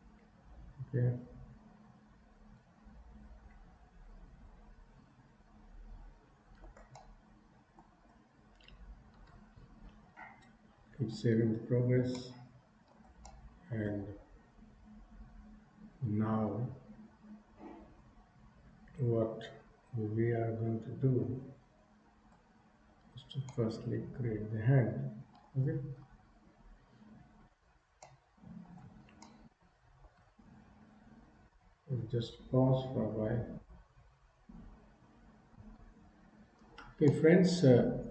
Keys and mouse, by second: 7.1 shift+middle click, 11.0 ctrl+s, 12.2 middle click, 13.4 shift+middle click, 23.6-25.5 middle drag, 26.1 KP_3, 28.1 shift+middle click, 29.3 shift+middle click, 37.1-38.1 middle drag.